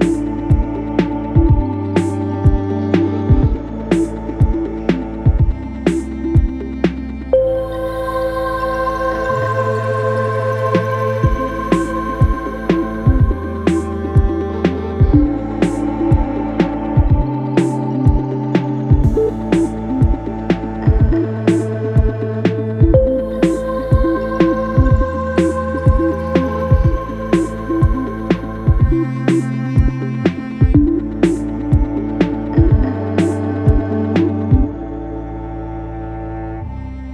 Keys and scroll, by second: 22.5 F9.